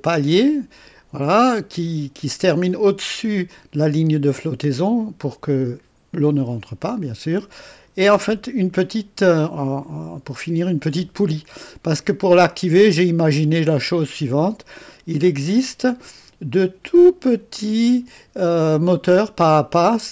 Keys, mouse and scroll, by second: 1.4 click, 3.5 click, 6.9 click, 11.9-14.0 drag, 17.0 click, 17.4 click.